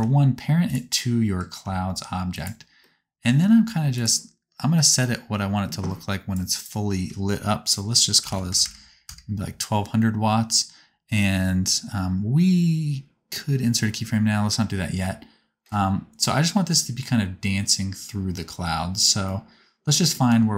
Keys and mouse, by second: 0.1 g, 1.7 g, 3.4 g, 3.8-4.9 middle drag, 4.9-15.8 drag, 8.5 KP_0, 20.3 g.